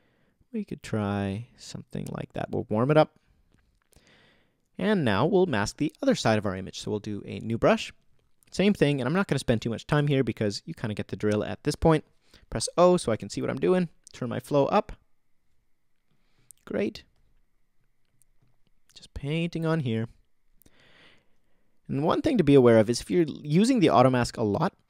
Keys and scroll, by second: 12.6 o.